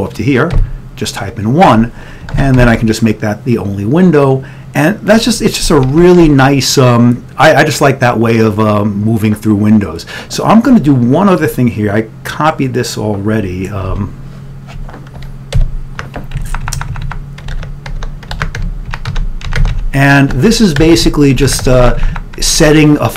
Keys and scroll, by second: 0.7 1, 2.4 ctrl+x, 6.0 shift+End, 6.3 Return, 14.1 ctrl+w, 15.6 ctrl+y, 16.4 Up, 17.0 Up, 17.6 Up, 18.1-20.9 Up, 19.2 ctrl+d, 19.7 Tab, 20.5 ctrl+d, 21.0 Tab, 21.0 Down, 21.5 Tab, 21.5 Down, 21.7 Tab, 21.9 Down, 23.1 ctrl+d.